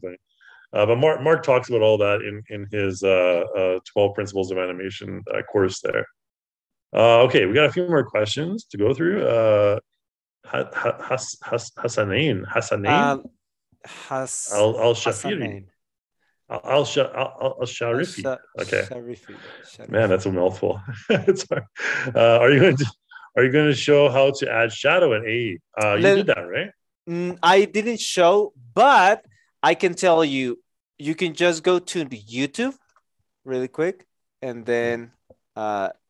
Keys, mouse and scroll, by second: 31.1 Return, 32.3-33.3 typing.